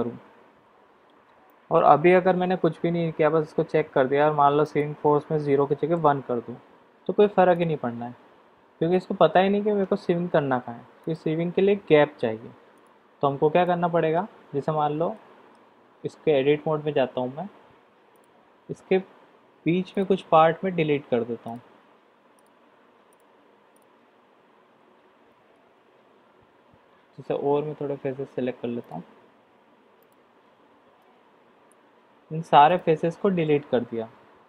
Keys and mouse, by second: 1.4 middle click, 4.6-6.2 drag, 11.2 click, 12.7 click, 13.6 middle click, 15.1 middle click, 16.2 Tab, 19.9 alt+click, 23.0 shift+click, 23.7 shift+click, 25.6 ctrl+z, 28.8 shift+click, 31.0 x.